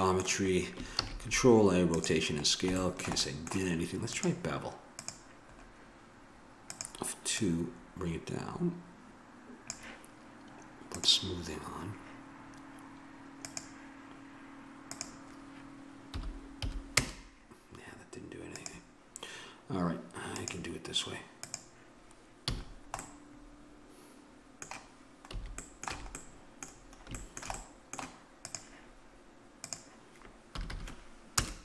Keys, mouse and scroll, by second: 0.9 ctrl+a, 4.1-5.5 drag, 6.7-8.1 middle drag, 8.1-12.1 drag, 13.4-17.4 drag, 18.5-22.5 drag, 22.5 a, 22.7 middle click, 23.2 click, 25.3 a, 25.9 a, 28.4-30.7 drag, 30.7 2.